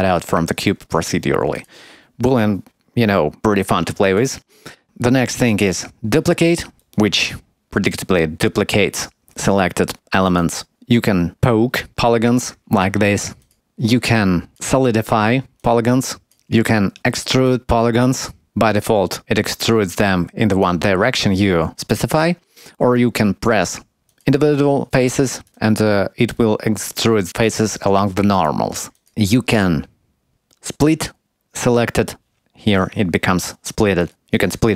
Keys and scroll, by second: 32.3 g, 32.6 g.